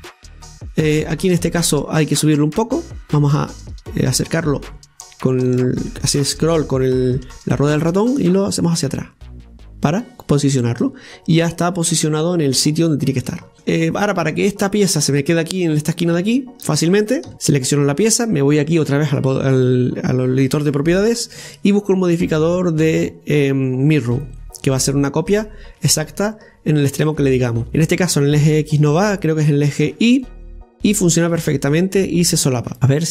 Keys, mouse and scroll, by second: 0.1 middle click, 0.7 scroll down 1, 0.9-3.0 middle drag, 3.0-4.1 drag, 4.1-5.3 middle drag, 5.3-6.3 scroll up 6, 6.3 shift+middle click, 6.8 scroll down 1, 7.0-8.7 middle drag, 8.7-11.7 drag, 11.7-13.5 middle drag, 13.5 scroll down 5, 13.6-14.6 middle drag, 14.6 scroll down 2, 14.9-17.5 middle drag, 17.5 Tab, 21.8 click, 27.7 scroll down 1, 27.8-29.7 middle drag, 29.7 click, 30.2 click, 32.1-32.8 middle drag, 32.8-33.1 scroll up 1.